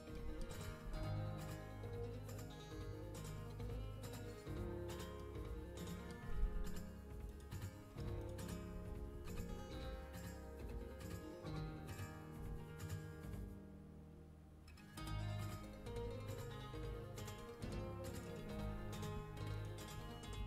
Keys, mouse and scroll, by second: 0.6 g, 5.1 middle click, 6.2 z, 7.2-9.1 middle drag, 8.6 z, 9.1 g.